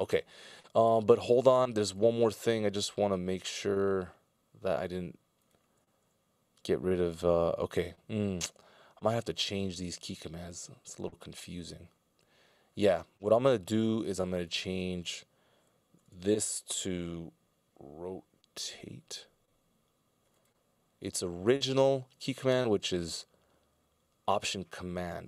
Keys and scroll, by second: 15.9 BackSpace.